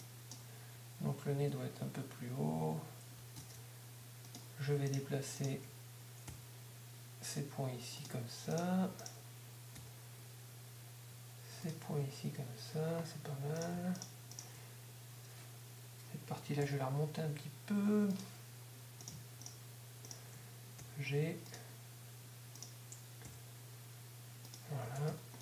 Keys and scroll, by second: 4.4 ctrl+Tab, 11.2 shift+g, 16.6 g, 17.1 g, 20.8 shift+g, 21.2 shift+g, 23.3 g, 24.9 Tab, 25.2 g.